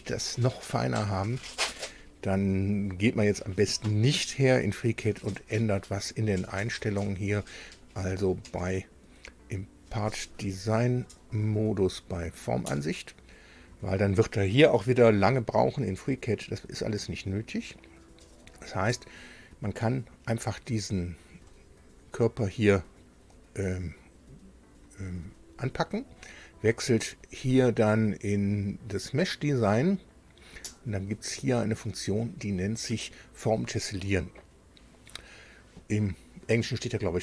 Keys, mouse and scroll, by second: 0.7-1.1 scroll down 2, 3.5 alt+Tab, 6.1 click, 7.1 click, 11.0 click, 12.1 click, 18.1 click, 21.3 click, 27.0 click, 28.9 click.